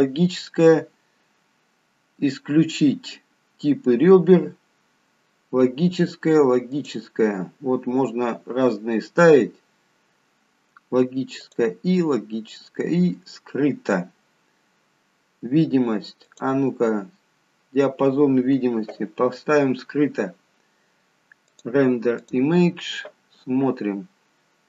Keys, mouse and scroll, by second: 6.8 click, 11.5 click, 16.3 click, 21.6 click.